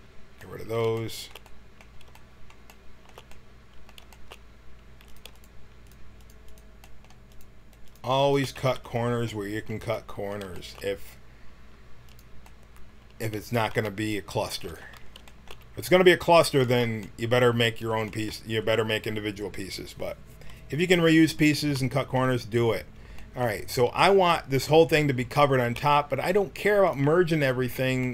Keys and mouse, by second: 0.5 middle click, 6.4 click, 8.5 x, 11.9-13.7 drag, 14.5-15.9 drag, 15.9 middle click, 16.6 middle click, 18.2 middle click, 18.4-21.4 middle drag, 26.8 click, 27.4-28.1 middle drag.